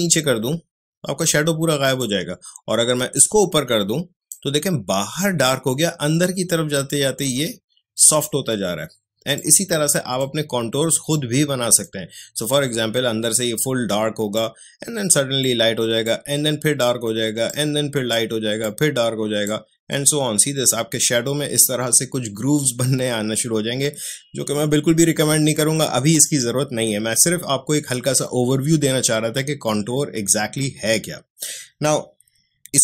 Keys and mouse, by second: 9.3-14.3 drag, 14.3-21.9 drag, 26.1 click.